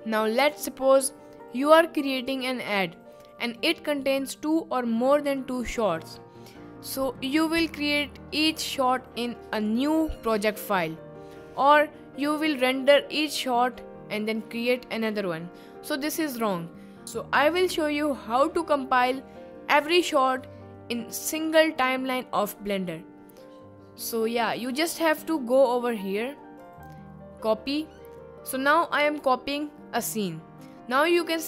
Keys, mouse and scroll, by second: 26.7-31.4 drag.